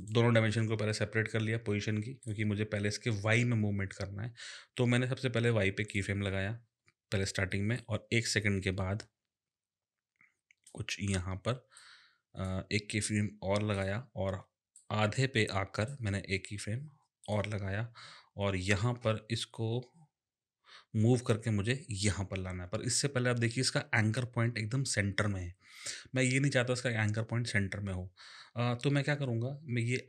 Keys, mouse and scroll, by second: 2.2 click, 5.9 click, 7.8 click, 11.8 click, 13.7 click, 17.2 click.